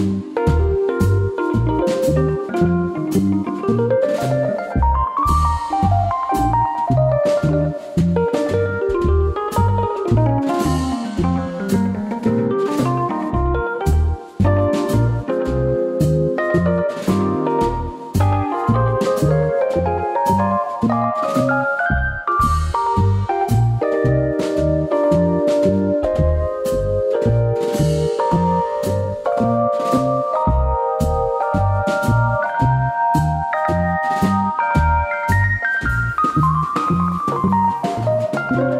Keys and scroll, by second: 0.4 super+x, 0.7 super+x, 0.8 super+z, 1.0 super+d, 2.2 super+x, 3.0 super+x, 3.4 super+x, 4.5 super+z, 5.5 super+x, 7.6 alt+shift+super+n, 9.8 super+x, 11.9 alt+BackSpace, 12.4 super+u, 17.3 alt+shift+super+n, 17.4 alt+BackSpace, 17.9 super+d, 19.7 super+j, 19.7 super+u, 25.5 super+d, 26.2 super+d, 26.4 super+x, 26.5 super+z, 27.3 alt+BackSpace, 27.5 super+d, 27.9 super+=, 30.0 super+d, 33.2 alt+BackSpace, 33.3 super+d, 35.1 super+d, 36.5 alt+BackSpace, 36.6 super+d.